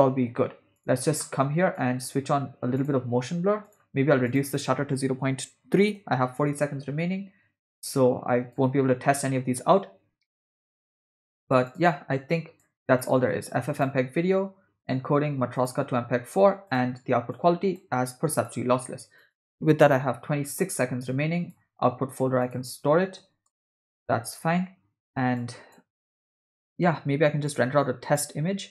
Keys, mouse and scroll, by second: 0.8 click, 1.7 click, 2.8 click, 3.7 drag, 4.3-6.0 drag, 7.7 click, 11.0 click, 11.7 click, 12.3 click, 13.0-14.1 drag, 14.8 click, 15.5-16.9 drag, 17.3 click, 18.4-19.5 drag, 20.5-21.6 drag, 22.4-23.7 drag, 23.3 /, 25.3 click, 26.3 space, 26.4 space, 27.5-28.7 drag.